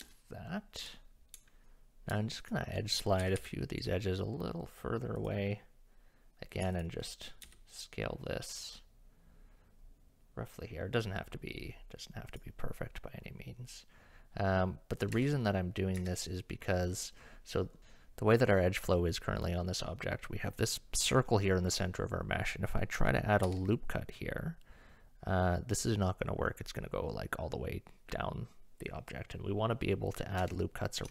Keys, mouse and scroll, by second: 0.1 shift+middle click, 1.6 g, 2.4 alt+click, 3.2 g, 6.7 alt+click, 7.4 s, 15.1 Tab, 16.0 Tab, 23.4 ctrl+r.